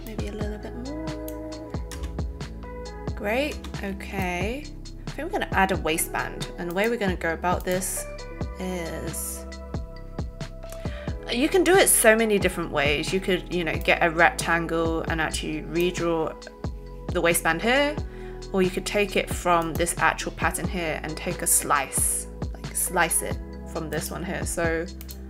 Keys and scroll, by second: 1.9 shift+space, 3.5 space, 4.0 alt+space.